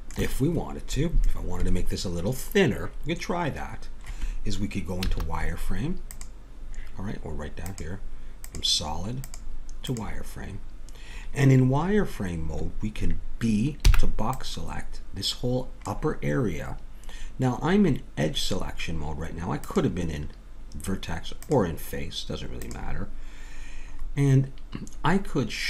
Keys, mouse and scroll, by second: 5.0 z, 8.7 click, 13.9 b, 19.6-22.9 drag, 24.0-25.6 middle drag.